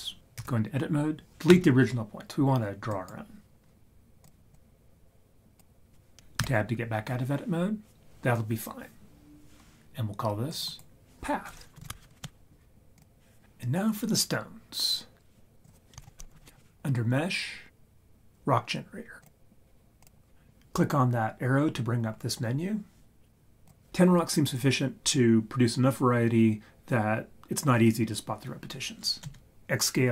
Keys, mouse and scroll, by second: 0.3 Tab, 1.5 Delete, 4.2 click, 4.5-5.6 drag, 6.3 Tab, 10.5 click, 10.7 click, 15.6 click, 16.0 shift+a, 20.0 click, 23.6 click.